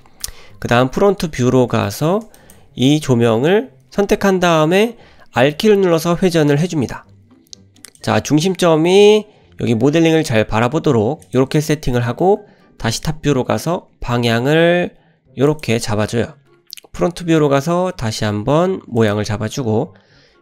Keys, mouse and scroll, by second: 0.3 `, 1.2-1.9 scroll up 4, 1.9 shift+middle drag, 2.4 drag, 5.5 r, 10.1 r, 11.9 middle click, 12.4 `, 13.3-13.7 scroll down 1, 14.0-14.3 scroll down 1, 14.0 r, 16.0 `, 17.3 r, 19.3 `, 20.2 r.